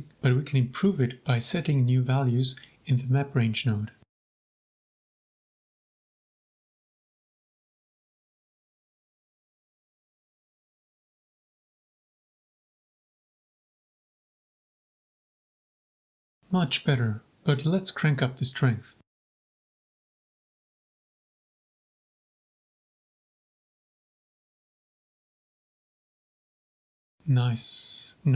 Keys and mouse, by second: 2.1 click, 2.8 shift+click, 2.9 middle click, 3.2 shift+click, 4.4-6.5 drag, 7.0 click, 7.9-10.6 drag, 10.8-12.0 drag, 12.5 shift+click, 12.6 middle drag, 12.7 middle click, 13.3 shift+click, 13.8 g, 14.0 z, 16.7 click, 17.5 shift+click, 18.4-20.5 shift+drag, 21.4 shift+click, 22.7 g, 22.8 z, 25.1 click, 26.4 middle click.